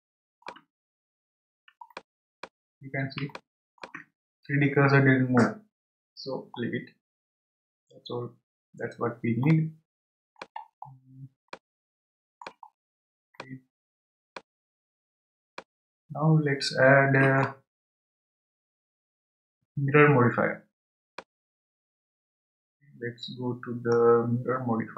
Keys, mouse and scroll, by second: 0.8 scroll up 1, 1.5 scroll up 7, 1.9 shift+middle click, 2.7-3.3 scroll up 1, 3.3-6.3 shift+middle drag, 6.6-9.5 scroll down 19, 9.5-10.6 middle drag, 10.6-11.5 scroll down 7, 11.5-12.7 middle drag, 12.7-13.4 scroll down 3, 13.4-14.6 shift+middle drag, 14.6 scroll up 1, 15.4 scroll up 3, 15.5-18.6 shift+middle drag, 21.1-24.2 middle drag.